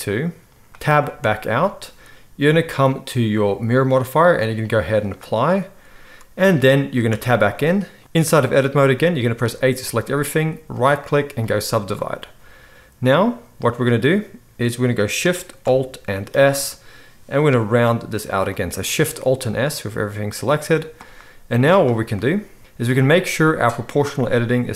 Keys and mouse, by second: 1.2 Tab, 7.1 Tab, 8.0 alt+a, 9.4 a, 16.3 alt+shift+s, 18.6-21.7 right drag, 21.7 middle click, 21.8-24.7 right drag.